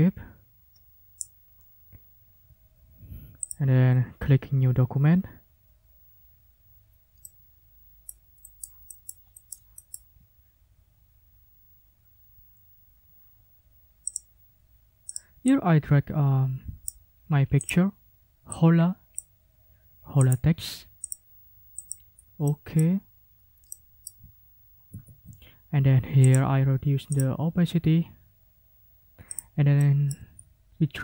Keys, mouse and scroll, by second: 3.4 click, 7.2-8.2 drag, 8.4-10.1 scroll up 8, 14.1 scroll up 2, 15.1 scroll up 2, 15.5-17.0 drag, 17.6 click, 18.5 click, 20.2 click, 21.0 click, 21.8 click, 22.4 click, 23.7 click, 24.9 ctrl+shift+f, 26.2 click, 27.1 click, 29.3 click, 29.7 click, 30.5-31.0 ctrl+scroll up 2.